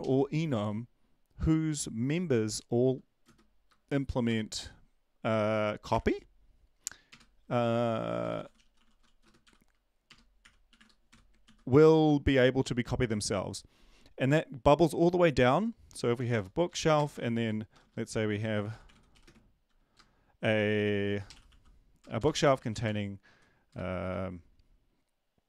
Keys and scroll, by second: 0.0 Down, 0.0 Left, 0.5 Right, 8.1-11.6 typing, 16.6 Up, 16.9 Return, 17.1 Return, 17.8-19.6 typing, 21.5-23.8 typing.